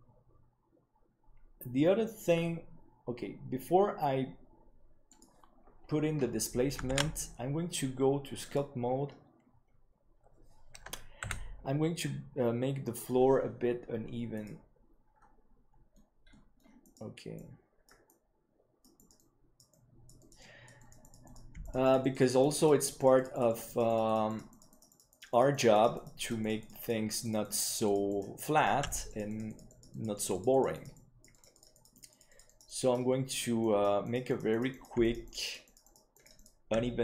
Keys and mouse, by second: 5.0-5.6 drag, 7.3 ctrl+s.